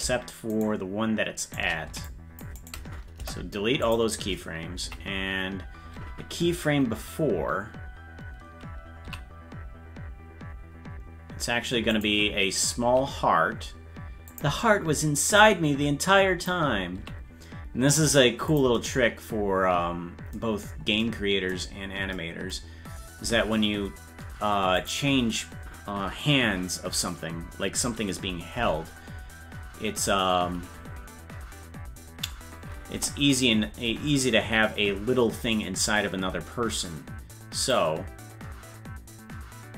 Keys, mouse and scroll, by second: 0.5 shift+right click, 1.4 shift+right click, 2.0 c, 3.2 Delete, 4.9 Left, 9.1 s, 15.4-16.5 drag, 17.0 s, 20.7-21.7 scroll up 3, 21.7 scroll up 1, 23.3 s, 33.0 KP_0, 37.8-39.7 drag.